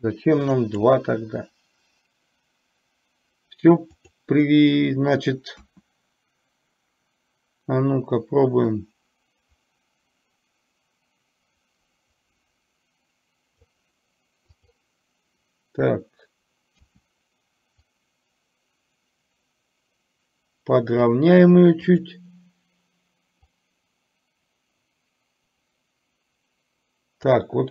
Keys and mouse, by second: 4.1 click, 9.0-13.9 drag, 14.7 click, 17.9 click, 18.6-21.1 drag, 22.0 click, 23.7-27.5 drag.